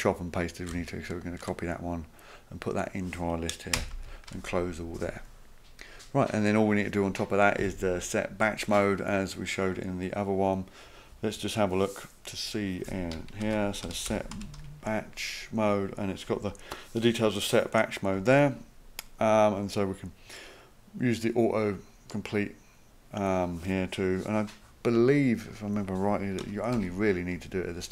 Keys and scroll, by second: 0.7 ctrl+c, 3.8 Return, 3.9 ctrl+v, 13.4 ctrl+f, 13.6-15.1 typing, 26.4 Return, 26.8 Up.